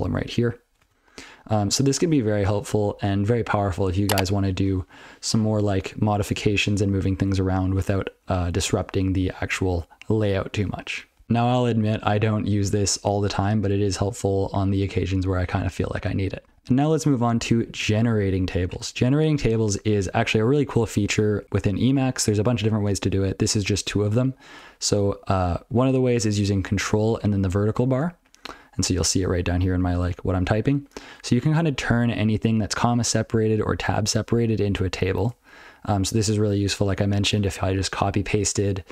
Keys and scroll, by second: 0.4 ctrl+f, 0.6 ctrl+f, 0.8 ctrl+n, 1.5 ctrl+b, 1.8 ctrl+n, 2.0 ctrl+n, 2.2 ctrl+n, 2.4 ctrl+n, 2.5 ctrl+n, 4.8 ctrl+p, 5.0 ctrl+p, 5.2 ctrl+p, 5.4 ctrl+p, 5.6 ctrl+p, 5.8 ctrl+p, 8.2 ctrl+f, 8.6 ctrl+a, 9.0 ctrl+f, 9.2 ctrl+f, 9.7 ctrl+alt+space, 10.2 ctrl+g, 19.9 ctrl+n, 20.2 ctrl+n, 20.4 ctrl+n, 20.8 ctrl+n, 21.3 ctrl+a, 21.4 ctrl+p, 21.5 ctrl+p, 21.7 ctrl+p, 22.1 ctrl+n, 22.3 ctrl+n, 22.5 ctrl+n, 22.7 ctrl+n, 25.4 ctrl+p, 25.6 ctrl+p, 25.7 ctrl+f, 26.1 ctrl+p, 26.2 ctrl+f, 26.8 ctrl+alt+f, 27.4-27.9 ctrl+n, 28.5 ctrl+a, 31.1 ctrl+f, 31.2 ctrl+a, 31.4 ctrl+p, 31.6 ctrl+p, 31.7 ctrl+p, 31.9 ctrl+p, 32.0-32.5 ctrl+f, 32.6 ctrl+f, 33.1 ctrl+f, 33.2 ctrl+n, 33.2 ctrl+f, 33.4 ctrl+f, 33.6 ctrl+p, 33.8 ctrl+f, 34.1 ctrl+n, 34.4 ctrl+f, 34.7 ctrl+n, 34.8 ctrl+n, 35.1 ctrl+a.